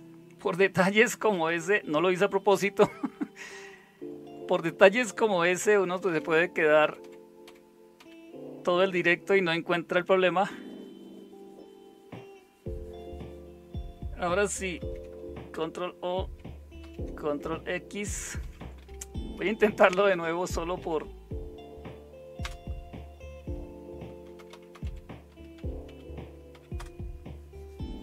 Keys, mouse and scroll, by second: 1.1 Left, 1.3 Left, 1.5 Left, 2.5 Right, 3.1 Right, 3.4 Right, 3.6 Right, 3.9 Right, 5.7 Left, 5.9 Left, 6.1 Left, 6.8 Left, 7.0-8.0 Left, 14.8 ctrl+o, 15.5 Return, 16.8 ctrl+x, 18.4 Up, 18.6 Up, 18.8 Up, 19.4 Up, 20.1-20.8 Up, 22.4 Return, 24.3-27.2 typing.